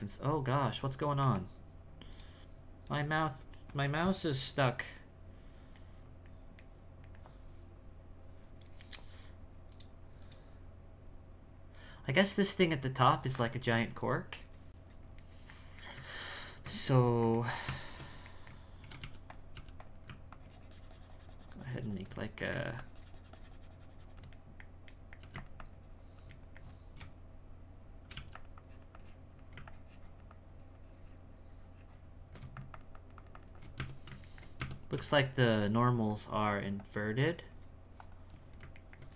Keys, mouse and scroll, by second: 5.9-9.7 middle drag, 12.3-16.6 middle drag, 16.6 Tab, 17.4 ctrl+middle click, 18.3 middle click, 18.8 shift+c, 19.0 f, 19.5 f, 20.3-22.2 ctrl+drag, 22.2 middle click, 22.8-24.3 ctrl+drag, 24.3 middle click, 25.6 ctrl+click, 26.4 middle click, 27.0 space, 28.6-33.8 drag, 33.8 Tab, 34.3 ctrl+middle click, 34.6 Tab, 35.1-36.8 shift+middle drag, 36.8 click, 37.1-38.8 drag, 38.8 ctrl+middle click.